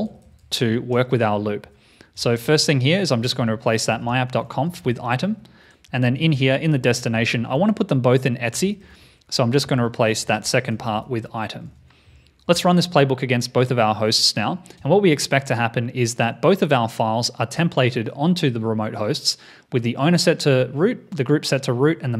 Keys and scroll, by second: 0.0 alt+shift+Left, 0.2 alt+shift+Left, 2.2 alt+shift+Right, 2.4 alt+shift+Right, 7.2 shift+super+Right, 8.6 alt+shift+Left, 8.8 alt+shift+Left, 9.0 alt+shift+Left, 11.6 super+s, 12.4 shift+super+m.